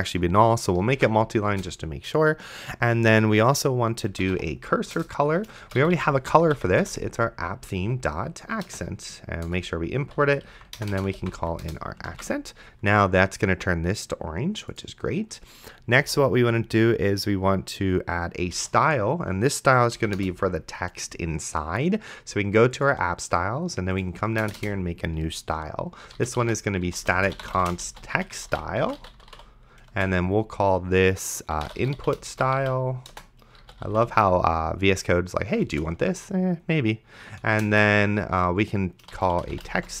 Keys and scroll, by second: 1.2 ctrl+s, 1.5 Return, 3.8-8.7 typing, 5.0 Return, 9.5 Return, 10.2-11.9 typing, 12.4 ctrl+s, 16.0 Return, 18.5 s, 18.9 t, 20.0 Down, 20.2 Return, 24.9 Return, 25.8-29.9 typing, 31.3-34.5 typing, 35.7 space, 37.4 =, 37.7 space, 39.0-40.0 typing.